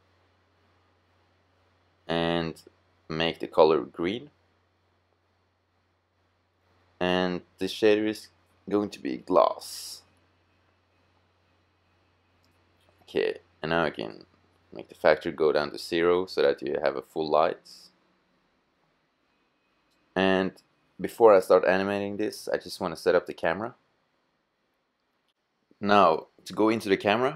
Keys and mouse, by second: 1.2-2.9 drag, 6.7 click, 12.0-13.7 drag, 19.1-19.7 middle drag, 21.0 middle drag, 26.0-27.3 middle drag.